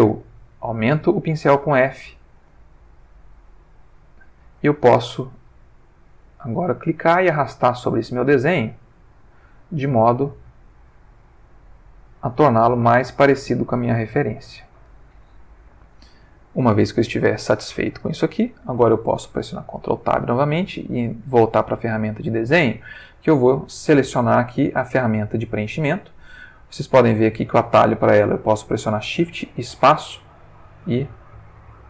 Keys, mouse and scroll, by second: 0.4 f, 1.7 click, 3.2 f, 4.1 click, 4.7-6.5 drag, 6.8-8.0 drag, 8.4 click, 9.7-10.6 drag, 10.7 click, 12.1 click, 13.9-15.0 drag, 16.3-17.3 drag, 19.6 ctrl+Tab, 21.2 click, 29.4 shift+space.